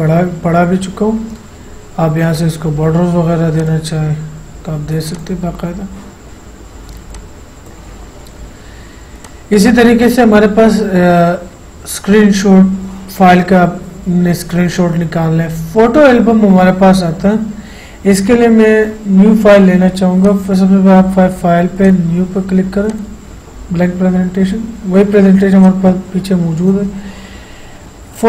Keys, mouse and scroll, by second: 2.5 click, 7.3-9.4 drag, 20.4 click, 25.8-28.2 drag.